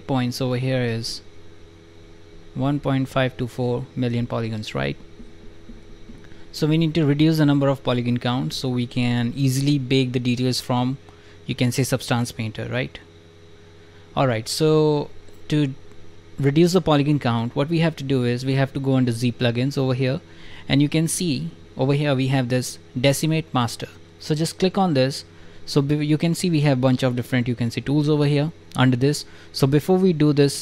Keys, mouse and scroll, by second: 2.6 click, 2.9 drag, 3.2 click, 3.4 click, 4.1 click, 4.3-4.7 drag, 5.0 click, 5.1 drag, 5.8 click, 5.8 click, 6.1-6.7 drag, 14.2 click, 17.2 click, 17.6 right click, 24.6 click.